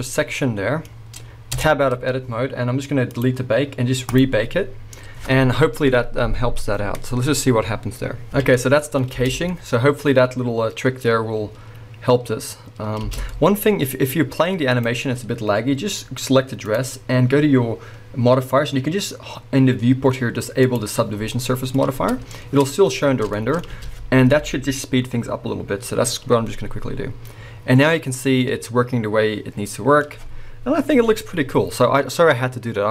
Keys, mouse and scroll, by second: 0.0-3.1 middle drag, 1.6 Tab, 2.0-3.1 scroll down 2, 3.1-8.3 drag, 8.3 alt+a, 8.3-9.3 middle drag, 9.1 space, 13.2 space, 13.3 middle click, 13.9-14.8 middle drag, 13.9-14.8 scroll up 1, 14.8 click, 14.9-16.7 middle drag, 16.7 click, 20.7 click, 21.1 scroll down 1, 21.3-32.9 middle drag, 23.7 space.